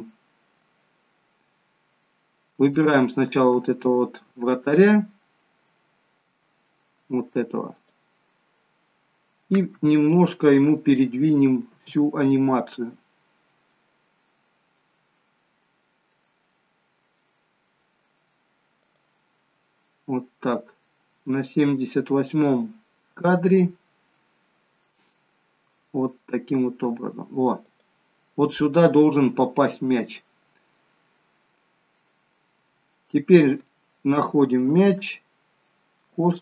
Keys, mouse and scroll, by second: 1.5-2.1 scroll down 3, 2.1-2.6 scroll down 3, 2.6 shift+middle click, 3.7-4.5 scroll up 4, 4.5 scroll up 1, 4.8 middle click, 7.7 click, 12.2 g, 21.8 g, 29.9-30.6 scroll up 3, 30.6-31.3 scroll down 6, 31.3 middle click, 33.7 shift+middle click, 34.9-35.7 scroll up 3, 36.1 click.